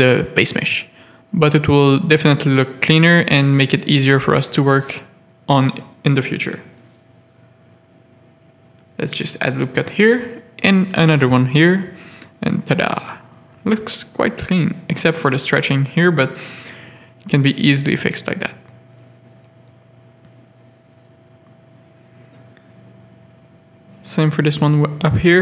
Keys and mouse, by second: 0.3 ctrl+click, 2.6 a, 4.2 g, 5.9 a, 6.6 click, 7.3 z, 7.9 ctrl+r, 9.7 ctrl+r, 11.5 Tab, 12.1 alt+a, 12.2 middle click, 12.6 z, 13.1 middle click, 13.7 middle click, 14.1 Tab, 14.5 z, 14.7 Tab, 15.4 Tab, 16.5 ctrl+r, 18.4 Tab, 19.0 alt+a, 19.5 z, 20.9 Tab, 21.7 z, 21.8 a, 22.0 middle click, 23.6 3, 24.9 x.